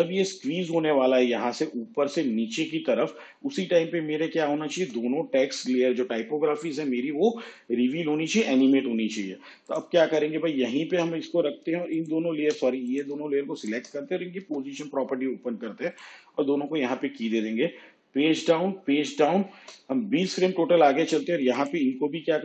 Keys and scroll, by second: 14.5 p, 18.1 shift+Page_Down.